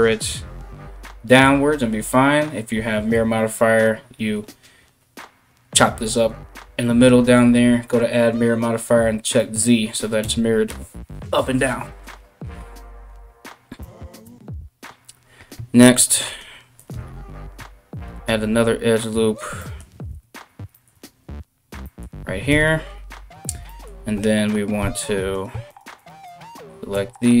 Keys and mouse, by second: 9.8 KP_1, 13.4 Tab, 13.8 Tab, 15.5 ctrl+r, 16.5-27.4 ctrl+middle drag, 17.7 alt+x, 19.7 ctrl+alt+x, 20.6 alt+x, 22.1 KP_1, 24.4 3, 24.9 right click, 25.3 shift+right click, 25.6 shift+right click, 25.9 shift+right click.